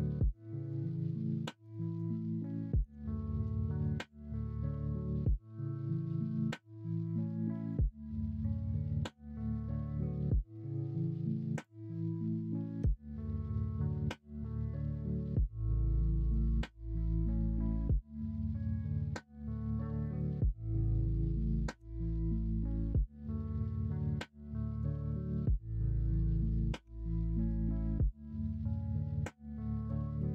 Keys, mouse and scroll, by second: 0.8 shift+middle click, 1.4 middle drag, 1.7 middle drag, 2.1 shift+middle drag, 2.6 middle drag, 3.1 shift+middle drag, 3.5 middle drag, 4.5-5.9 middle drag, 13.2-16.3 middle drag, 25.3 middle click, 26.8 Tab, 27.3 middle click, 29.6 middle click, 30.1 ctrl+r.